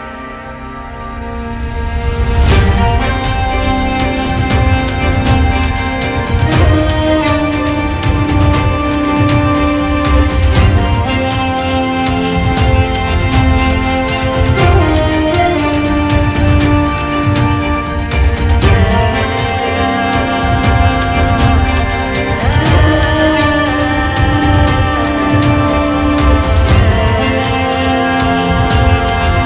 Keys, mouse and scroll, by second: 0.2 click, 2.0 scroll up 4, 2.2 middle click, 2.7 click, 3.0 KP_3, 3.7 click, 4.0 middle click, 4.2-5.2 scroll down 5, 5.2 shift+click, 6.2 ctrl+c, 7.0 ctrl+l, 8.4 middle click, 8.5-8.9 drag, 8.9 shift+a, 10.1 click, 11.2 click, 11.3 shift+d, 13.6 middle click, 13.8 click, 14.7 middle click, 15.0-15.4 ctrl+shift+right drag, 15.4 click, 15.7 middle click, 16.1-17.3 drag, 16.5 shift+a, 17.7-19.5 drag, 20.1 shift+a, 21.2-23.2 drag, 23.2-23.6 middle drag, 23.6-29.4 drag.